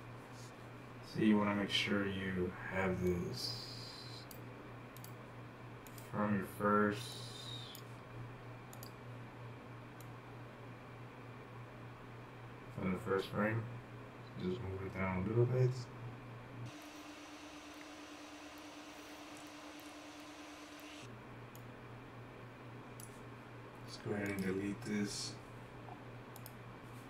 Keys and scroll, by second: 19.3-19.7 typing.